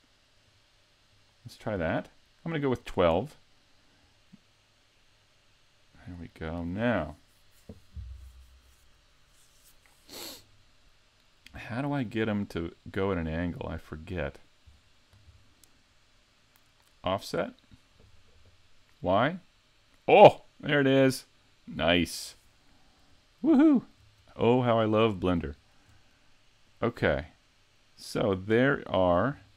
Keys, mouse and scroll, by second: 0.4 click, 1.1 click, 2.8 click, 4.0 click, 11.7-12.3 scroll down 2, 12.3-13.2 scroll down 4, 13.2-13.9 scroll up 1, 13.9 scroll down 1, 14.0-15.5 scroll down 1, 17.1 click, 19.2 click, 23.1-23.7 scroll up 2, 23.7 shift+middle click, 25.0-25.6 scroll up 1, 25.6 shift+middle click, 25.6 scroll up 1, 26.6 click, 29.4-29.5 scroll down 3.